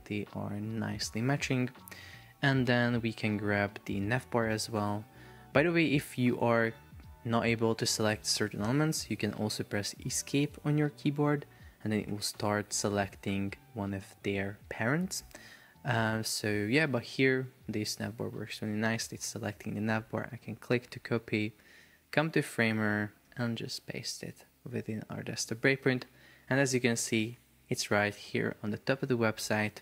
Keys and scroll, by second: 2.8 super+Tab, 10.3 Escape, 13.4 Escape.